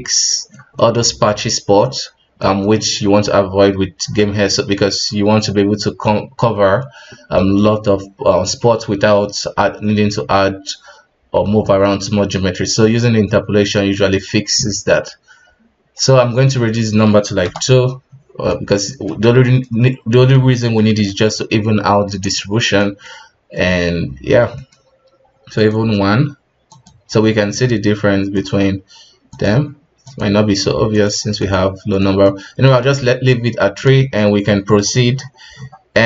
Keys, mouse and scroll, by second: 13.9 middle click, 14.2 KP_1, 16.7-18.4 drag, 18.4-19.7 middle drag, 19.7-20.1 scroll up 2, 20.5-22.1 shift+middle drag, 22.1 scroll down 3, 22.4-23.8 middle drag, 23.8 KP_1, 24.2-24.5 scroll down 1, 24.5 middle click, 25.5-26.8 drag, 27.2 middle drag, 27.4 scroll up 3, 28.3 click, 29.3 click, 30.0 click, 30.9-32.0 drag, 32.0-32.8 middle drag, 32.8 alt+a, 33.0-33.4 middle drag, 33.4 KP_1, 34.0 shift+middle click, 34.7-36.0 scroll up 15.